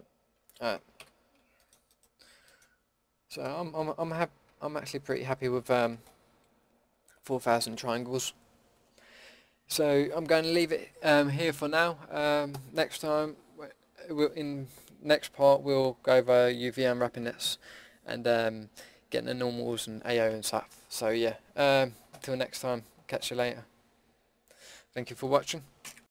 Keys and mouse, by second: 0.3 alt+h, 0.9 a, 2.8 Tab, 4.5 a, 4.9 Tab, 5.2 a.